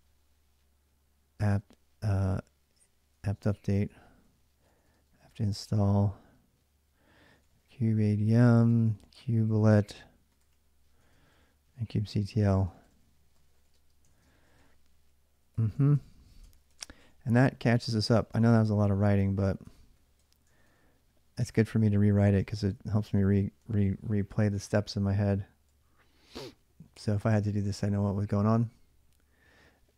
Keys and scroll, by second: 1.0-5.7 typing, 6.8-15.3 typing, 15.6 ctrl+[, 16.3 ctrl+[, 16.5-26.7 typing, 19.9 Return, 20.3 ctrl+[, 21.4 Return.